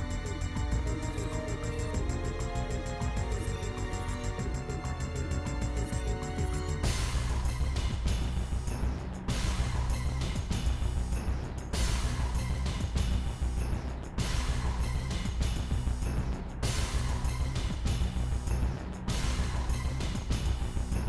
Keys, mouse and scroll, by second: 1.3 click, 2.0 click, 2.3 middle click, 2.9 scroll down 2, 3.0 middle click, 4.1 click, 5.2 click, 5.4 middle click, 5.9 shift+click, 6.1 middle click, 6.5 s, 8.7 ., 9.3 s, 10.2 middle click, 10.5 scroll up 1, 10.7 shift+middle click, 11.6-14.6 middle drag, 14.6 e, 15.7-16.7 middle drag, 16.7 s, 17.7 middle click, 17.9 scroll up 2, 18.1-19.7 shift+middle drag, 19.7 KP_1, 20.2 click, 20.4-21.0 scroll up 3, 20.5 shift+middle click, 20.9 shift+middle click.